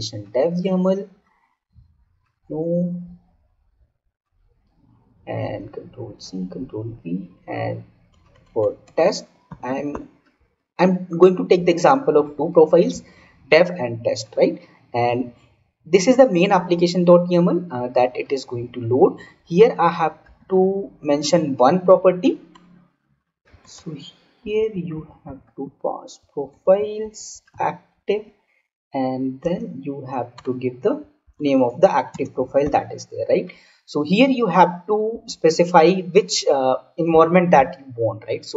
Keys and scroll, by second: 5.5 ctrl+c, 5.8 ctrl+v, 29.3 space, 32.0 space.